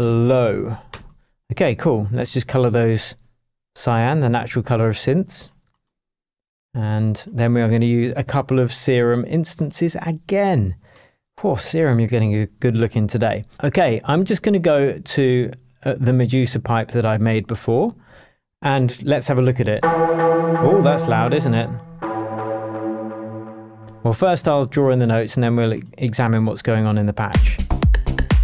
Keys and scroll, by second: 0.0-1.0 typing, 1.9 shift+Return, 27.3 space.